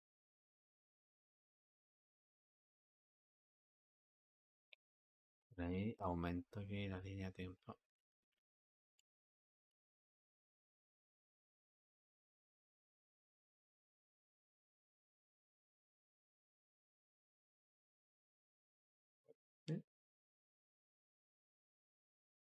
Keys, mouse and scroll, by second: 0.5-3.9 drag, 7.4-9.6 drag, 11.9-14.9 drag, 15.4 space, 21.4 click.